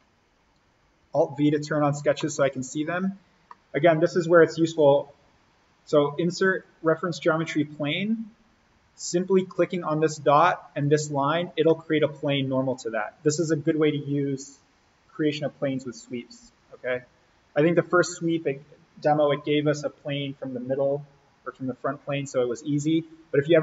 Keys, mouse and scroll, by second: 1.0 alt+v, 1.5 click, 2.2 middle click, 2.8-3.2 scroll up 1, 3.4 middle click, 3.9 scroll down 1, 4.6 click, 10.9 click, 11.4 scroll down 1, 11.6 middle click, 11.8 scroll.